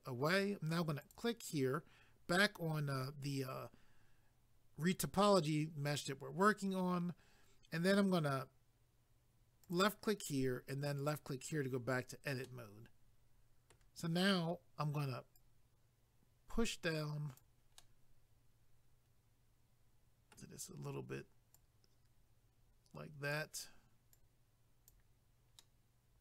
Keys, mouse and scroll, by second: 1.0 click, 9.6 click, 11.0 click, 12.4 middle click, 15.4 click, 17.8 middle click, 21.5 click, 24.2 click, 25.6 middle click.